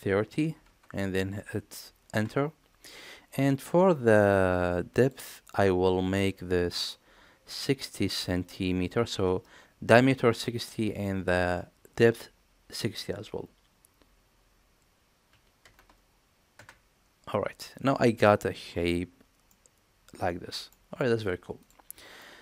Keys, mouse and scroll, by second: 5.0-17.7 drag, 19.5-20.7 middle drag, 21.6 click, 22.2-22.4 middle drag.